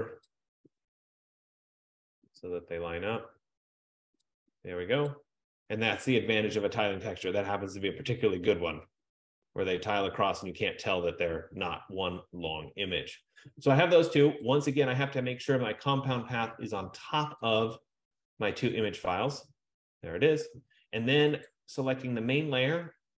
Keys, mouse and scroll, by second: 4.3 click, 5.3 click, 6.3 F15, 14.8 click, 17.5 click, 21.5 click.